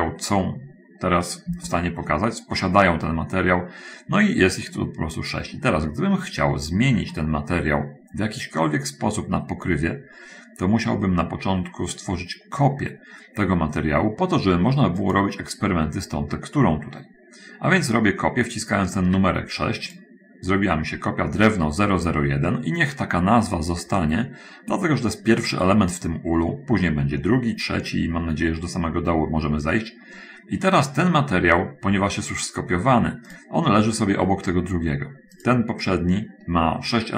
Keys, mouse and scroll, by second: 1.7 scroll up 1, 1.9 shift+middle click, 7.5-11.5 middle drag, 19.9 click, 33.4 click, 35.8 click.